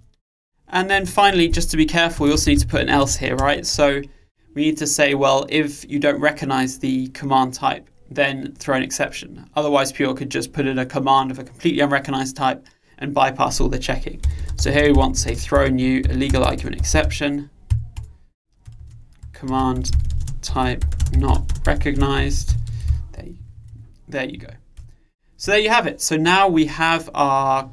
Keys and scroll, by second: 20.0 Return.